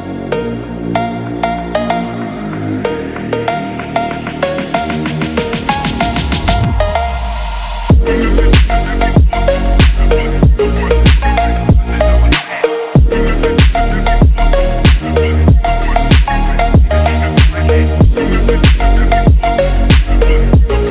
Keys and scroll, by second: 4.3 ctrl+z, 5.4 ctrl+z, 11.9 ctrl+z, 13.0 Up, 16.0 ctrl+z, 17.2 ctrl+z, 18.2 BackSpace, 18.8 ctrl+=, 20.5 ctrl+z.